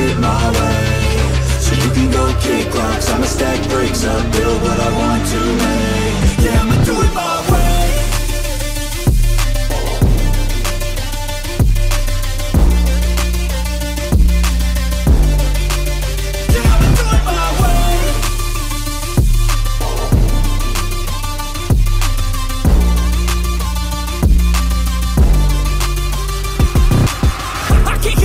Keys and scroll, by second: 13.4 x, 20.7 ctrl+alt+shift+e, 24.0 Return.